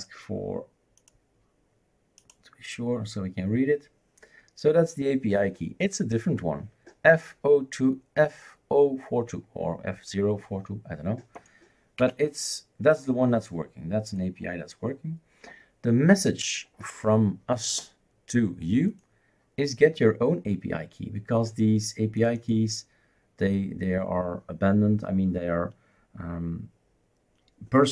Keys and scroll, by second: 12.0 Escape.